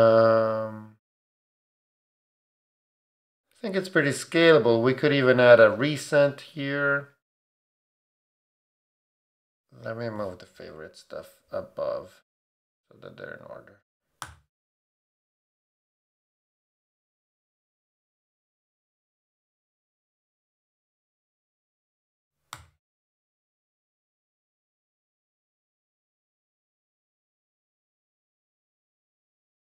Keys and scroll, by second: 14.2 super+g, 22.5 super+g, 23.3 shift+super+g, 23.4 shift+super+Down, 27.2 shift+Down.